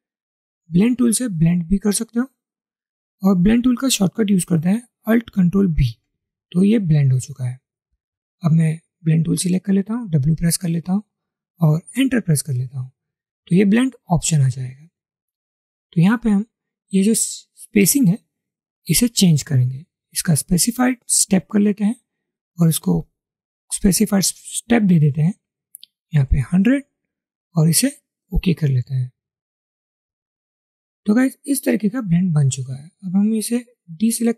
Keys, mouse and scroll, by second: 5.9 ctrl+alt+b, 10.2 typing, 12.0 Return, 25.6-27.6 typing.